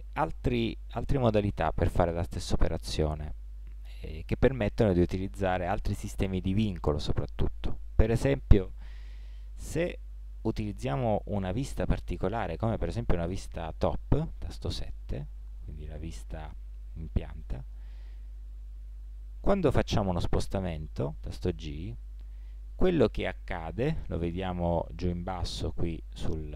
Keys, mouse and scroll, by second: 4.4-12.4 middle drag, 12.4 KP_7, 15.6-20.4 middle drag, 21.3 g.